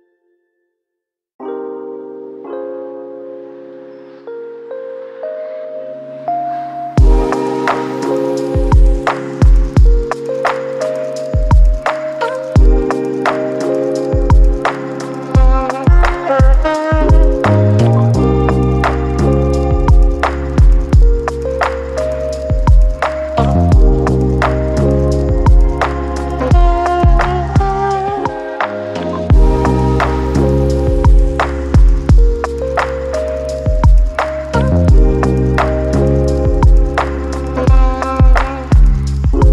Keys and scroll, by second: 16.8-18.4 typing, 38.2 c, 38.9 1.